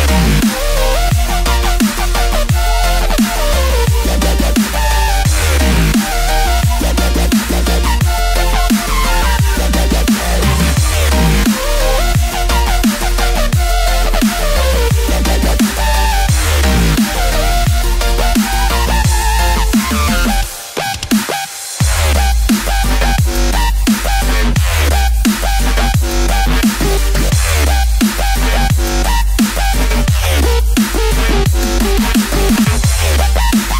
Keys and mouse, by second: 3.1 Tab, 3.6-6.1 middle drag, 8.3 shift+click, 15.1 r, 18.0-18.6 middle drag, 20.8-25.5 drag, 26.2-30.4 middle drag, 31.4 right click.